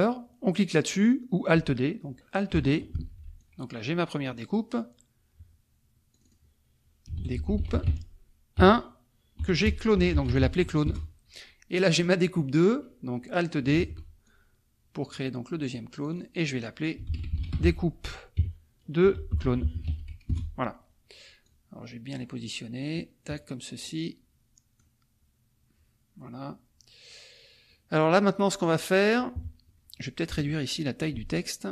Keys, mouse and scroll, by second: 3.0 alt+d, 3.4-4.7 alt+drag, 6.1 click, 6.8-8.6 typing, 9.7-10.9 typing, 11.7 click, 13.8 alt+d, 14.2-15.2 alt+drag, 16.0 click, 16.8-20.4 typing, 21.4-22.9 drag, 23.9-25.0 drag, 28.0 click, 29.4 KP_Subtract, 30.2 click, 31.4-31.7 ctrl+shift+drag.